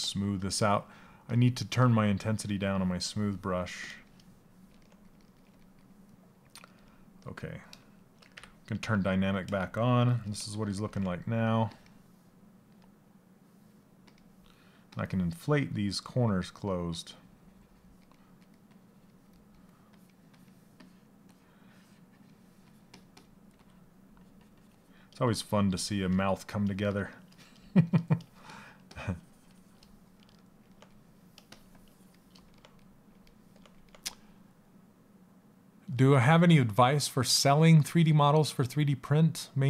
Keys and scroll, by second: 7.9 d, 23.0 s.